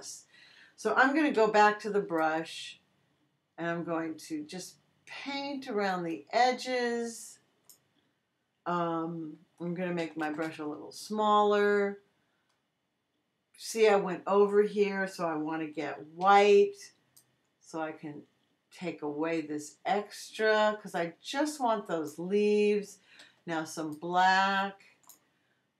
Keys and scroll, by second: 1.3 b, 10.0 [, 16.2 x, 23.2 x.